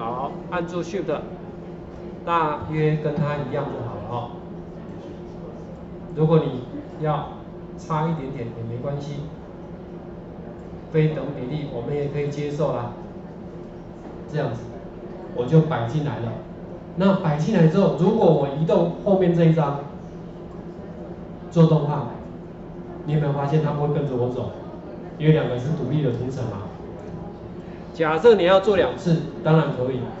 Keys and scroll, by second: 28.2 ctrl+z.